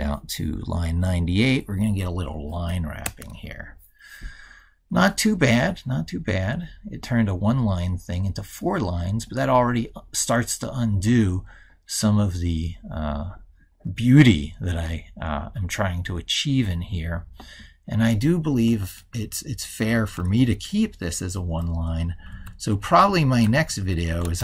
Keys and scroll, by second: 18.9 ctrl+shift+Left.